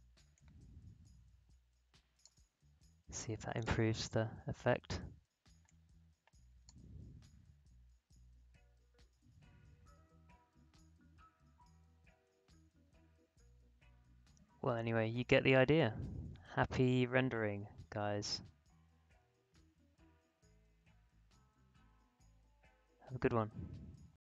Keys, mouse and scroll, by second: 6.8 space, 24.1 space, 24.1 click.